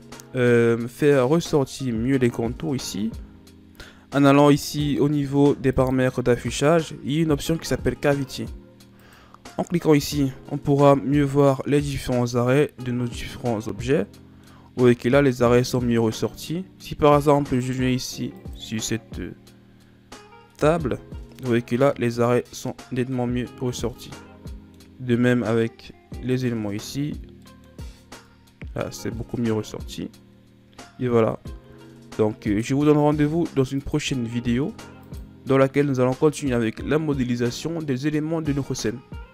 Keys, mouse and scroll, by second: 1.4-2.5 scroll up 2, 2.5-3.3 shift+scroll down 5, 3.3 scroll down 1, 5.8 click, 10.6-11.8 middle drag, 11.8-12.8 scroll up 1, 12.8-13.1 scroll down 1, 13.1-17.6 middle drag, 17.6 click, 18.4 click, 19.2-19.9 scroll down 6, 19.9-21.2 middle drag, 21.2-21.6 shift+scroll up 2, 21.6-26.3 middle drag, 26.3 click, 26.8 click, 27.5 middle click, 27.8 scroll up 2, 28.3-32.2 middle drag, 33.8 click, 35.0 click, 36.8-37.9 scroll down 1, 37.9-39.3 scroll down 1.